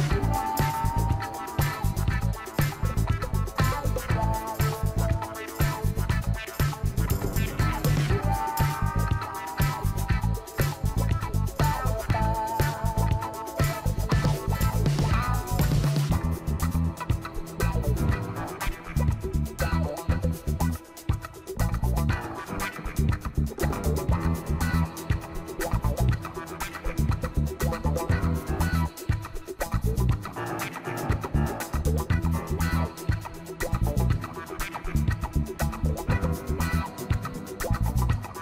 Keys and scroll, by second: 5.6 ctrl+t, 17.5 ctrl+Return, 18.8 ctrl+c, 19.2 ctrl+v, 20.7 ctrl+alt+z, 21.8 ctrl+x, 22.3 ctrl+v, 33.9 ctrl+j, 34.8 ctrl+t.